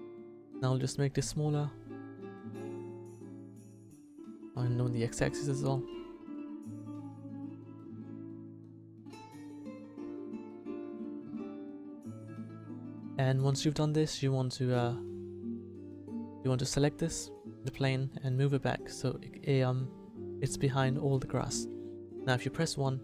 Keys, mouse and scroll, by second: 0.5 s, 4.2 s, 6.7 g, 8.5 g, 10.8 s, 13.3-20.3 drag, 21.1 click, 22.0 KP_1.